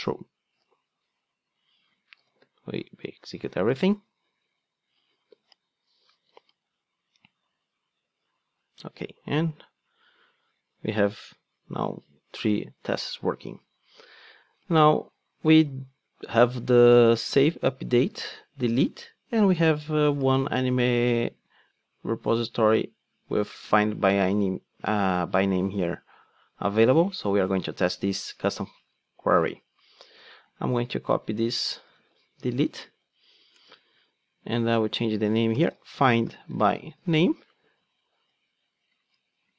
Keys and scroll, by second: 2.1 ctrl+d, 28.9 ctrl+Tab, 32.0 super+c, 33.6 super+v.